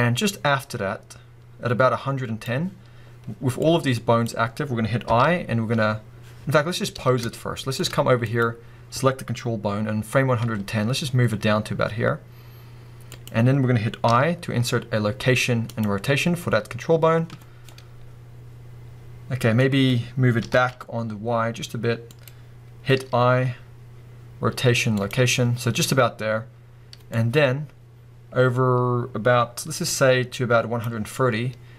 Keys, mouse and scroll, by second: 6.4-7.3 scroll up 1, 7.3-8.3 shift+middle drag, 8.3 click, 10.4 g, 13.3 click, 17.5 scroll down 2, 17.6-22.2 middle drag, 20.4 g, 22.2 click, 27.1-31.2 drag, 31.0 scroll down 2, 31.2-31.7 middle drag.